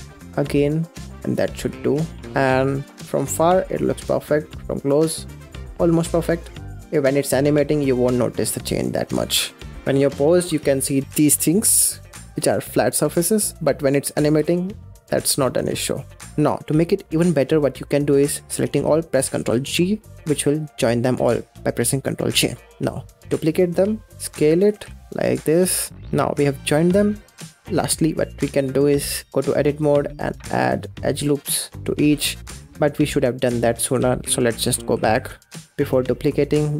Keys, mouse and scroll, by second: 0.0 shift+r, 0.5-1.4 middle drag, 1.4 click, 1.7 scroll down 4, 2.1-3.4 middle drag, 3.4-3.9 scroll up 9, 4.3-6.1 middle drag, 6.1 space, 7.6-11.6 middle drag, 14.2 space, 15.6-16.2 middle drag, 16.2 click, 16.9-19.3 middle drag, 19.3 ctrl+j, 20.4 click, 21.0 click, 21.3-22.3 middle drag, 22.3 click, 23.1 shift+d, 24.1 s, 24.6 g, 26.0 click, 26.2-26.7 middle drag, 26.7 click, 27.1 scroll down 3, 27.4 click, 27.7-32.0 middle drag, 32.0 ctrl+z, 32.1 ctrl+z, 32.3 ctrl+z, 32.4 ctrl+z, 32.5 ctrl+z, 32.6-33.3 ctrl+z, 33.5 ctrl+z, 33.7 ctrl+z, 33.8 ctrl+z, 34.0 ctrl+z, 34.1 ctrl+z, 34.2 ctrl+z, 34.4 ctrl+z, 34.6 ctrl+z, 34.7 ctrl+z, 34.8 ctrl+z, 35.0 ctrl+z, 35.0 ctrl+z, 35.2 ctrl+z, 35.5 middle drag, 35.6 ctrl+z, 35.9 middle drag, 36.2 click, 36.4 scroll up 4, 36.6 Tab.